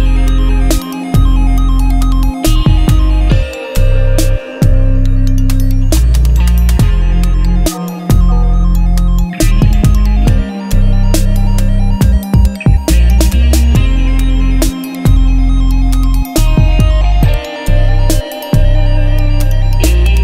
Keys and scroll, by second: 0.3-1.1 typing, 7.7 ctrl+Return, 8.3 Return, 9.7 BackSpace, 10.5 ctrl+z, 11.3 ctrl+Return, 12.3 v, 15.5 ctrl+t, 18.3 Return, 18.5 Left.